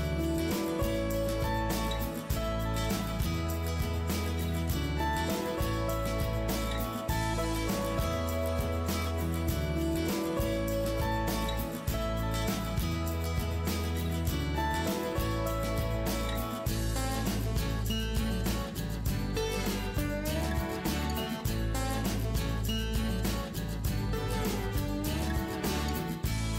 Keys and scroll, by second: 8.9 ctrl+d, 13.0 Up, 13.0 Up, 13.1 Up, 13.4 Right.